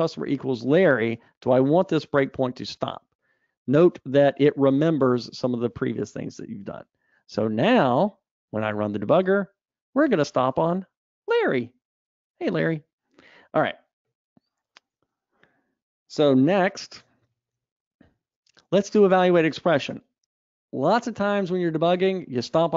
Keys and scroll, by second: 7.7 super+r, 12.9 super+F2, 16.8 alt+Up, 17.4 super+Up.